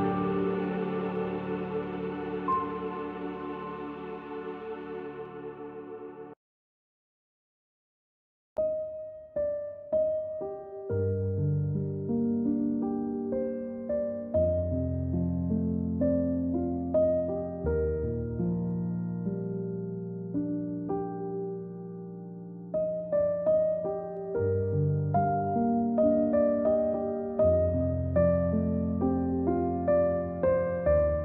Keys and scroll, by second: 0.0-2.0 typing, 3.1-4.3 typing, 5.5 =, 7.5 z, 8.7 space, 10.2-11.3 typing, 19.4-22.1 typing, 23.2 =, 26.2 -.